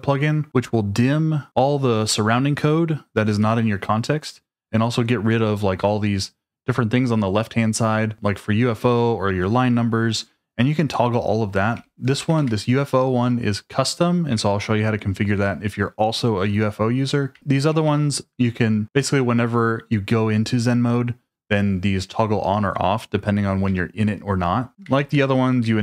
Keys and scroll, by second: 11.5-12.8 typing, 14.3 Escape, 15.3 j, 17.3 shift+v, 17.7 j, 23.7 Escape, 24.7 typing, 25.6 Escape.